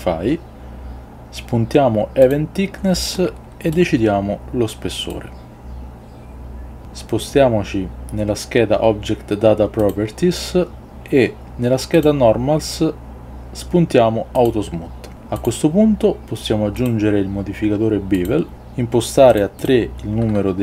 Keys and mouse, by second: 18.3-20.6 drag.